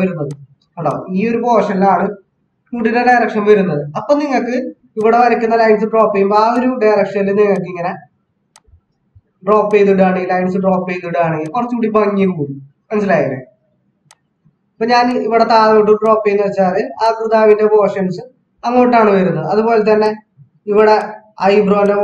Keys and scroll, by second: 2.7 ctrl+z.